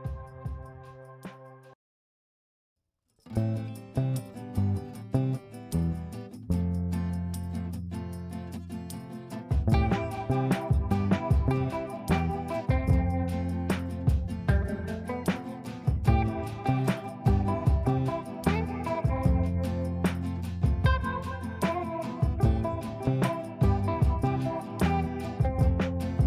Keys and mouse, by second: 2.1-2.7 drag, 12.7 space, 13.2 F2, 13.7-14.3 click, 14.7 space, 16.0 click, 18.3 space, 19.5-20.8 click, 19.8-21.7 ctrl+drag, 21.7 shift+click, 22.0 c, 22.8 F3, 24.1-25.0 drag.